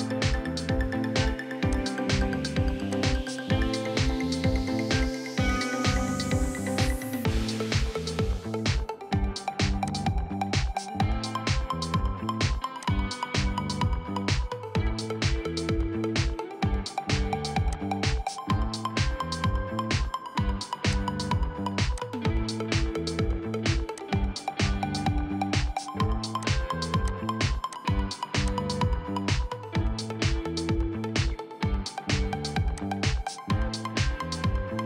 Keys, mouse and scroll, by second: 9.1-9.9 scroll down 1, 15.4-16.0 scroll up 1, 16.1-16.9 scroll down 1, 23.3 scroll down 1, 24.6 middle click, 25.4-26.5 scroll up 1, 28.9 middle click, 33.7-34.0 scroll up 1, 34.0-34.4 scroll down 1, 34.4 middle click.